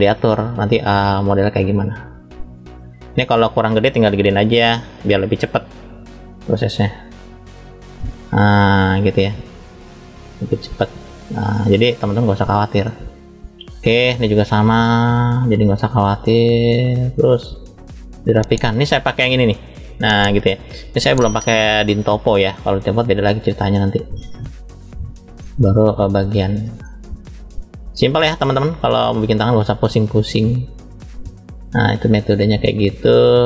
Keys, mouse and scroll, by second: 0.5 click, 5.2 click, 12.7 middle click, 14.0 click, 20.3 middle click, 21.8 click, 25.3 middle click, 26.0 click, 26.7 shift+middle click, 27.8 click, 28.8 middle click, 29.8 click, 32.5 click.